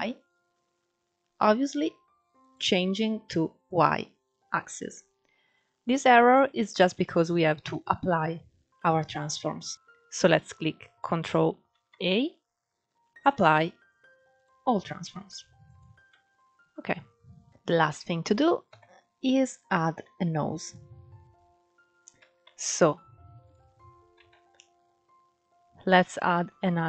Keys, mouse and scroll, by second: 2.1 click, 3.3 click, 4.4-6.1 middle drag, 6.1-6.9 scroll up 3, 6.9-9.0 scroll down 2, 9.0 middle click, 11.4 ctrl+a, 15.3 click, 15.8-18.4 middle drag, 18.4 KP_1, 19.1 scroll up 3, 19.7 shift+middle click, 20.3 click, 21.2 scroll up 1, 21.6 scroll down 3, 22.1 shift+a, 23.1-23.8 drag, 23.8 shift+a.